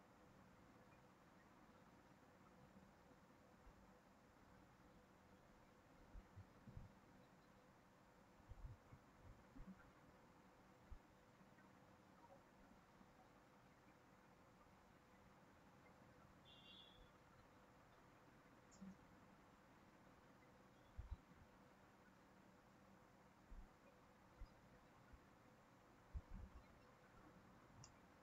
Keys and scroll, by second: 3.5 ctrl+c, 3.7 ctrl+v, 13.7 ctrl+c, 14.0 ctrl+v.